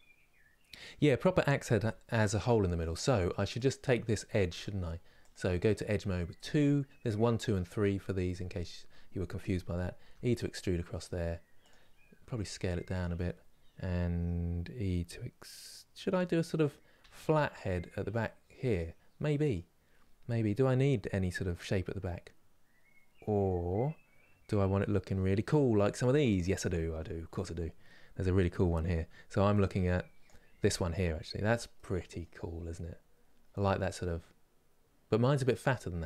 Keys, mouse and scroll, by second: 3.4 Left, 4.2 2, 4.3 click, 9.7 e, 26.0 click.